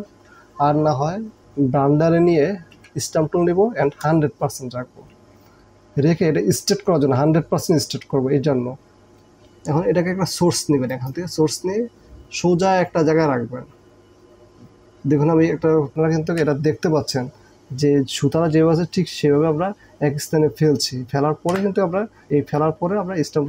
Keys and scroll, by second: 2.9 s, 4.0 KP_0, 5.5 space, 16.5 KP_1, 21.7 KP_1.